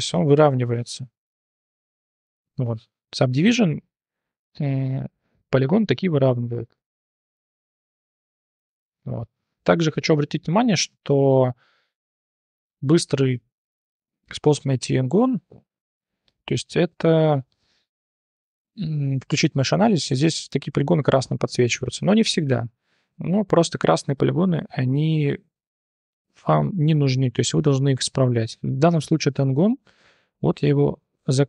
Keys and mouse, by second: 6.0 click, 7.6-8.6 drag, 8.8 shift+click, 9.8 3, 9.9 click, 10.4 shift+drag, 10.7 3, 11.1-11.5 drag, 14.0 click, 14.8 3, 15.0 click, 15.3-16.3 drag, 16.4-16.8 drag, 17.5-17.8 drag, 19.1 click, 20.0 3, 20.6-21.5 drag, 22.2-22.5 drag, 23.1 3, 24.0-25.1 drag, 25.1 3, 25.5-26.1 drag, 26.7 3, 27.3 click, 27.6 1, 27.9 click, 28.7 shift+click, 30.0 j, 30.6 click.